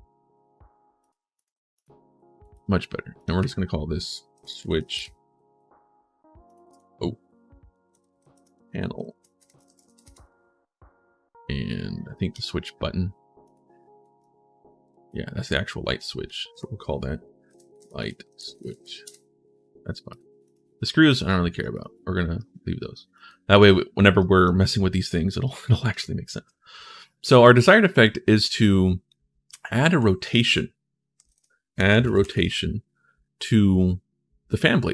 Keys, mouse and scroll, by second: 0.8 click, 1.1 click, 1.5 click, 2.2 click, 2.9 click, 4.1 shift+s, 4.6 c, 9.4 a, 12.1 click, 13.2 click, 13.9 w, 15.8 click, 16.0 click, 17.3-19.0 typing, 19.8 click, 20.2 click, 25.2 click, 27.0-28.8 drag, 29.6 click, 30.7-32.6 typing.